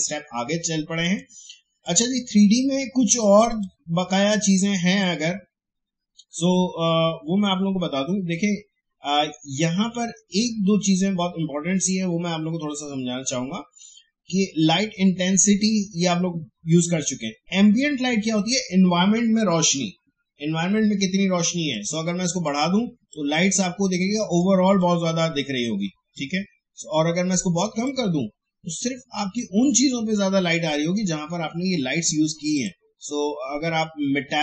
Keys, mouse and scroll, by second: 1.0 click, 21.7-31.7 drag, 32.5 click.